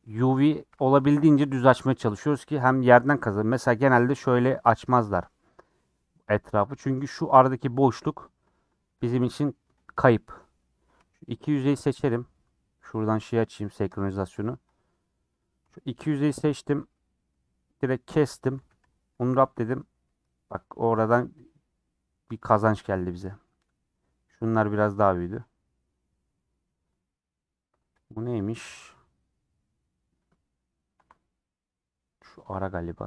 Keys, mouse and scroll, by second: 0.9 a, 5.6 click, 7.4 click, 7.8 click, 8.0 click, 8.3 click, 8.5 click, 8.8 click, 9.0 click, 9.3 click, 9.5 click, 9.8 click, 10.6 click, 11.6 shift+click, 14.6 click, 15.3 click, 16.7 middle click, 18.6 a, 19.5 u, 24.6 middle click, 24.9 scroll up 3, 25.3 middle click, 26.0 scroll down 1, 26.2-27.4 scroll up 3, 27.4-28.1 scroll up 1, 28.1 click, 28.5 click, 28.7-31.0 middle drag, 31.0 KP_Decimal, 31.5-32.7 middle drag, 32.7-33.0 scroll down 14.